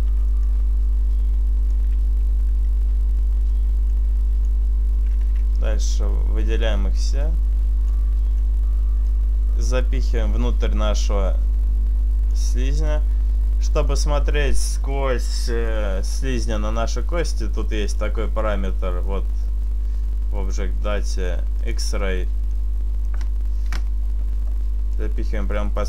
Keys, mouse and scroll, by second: 0.3 e, 1.6 right click, 1.6 click, 3.5 right click, 4.0 click, 7.5 Tab, 7.5 click, 8.5 middle click, 9.1-9.9 scroll down 1, 9.9 click, 12.8 click, 13.8 middle click, 17.9 click, 21.7 click, 22.6 middle click, 23.5 KP_7.